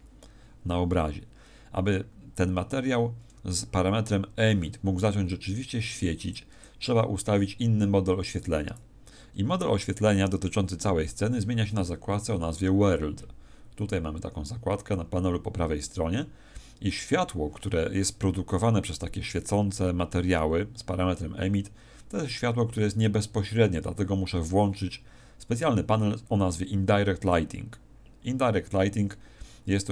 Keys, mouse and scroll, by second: 2.6 Escape, 5.2 click, 6.6 click, 13.7 click, 27.1 click.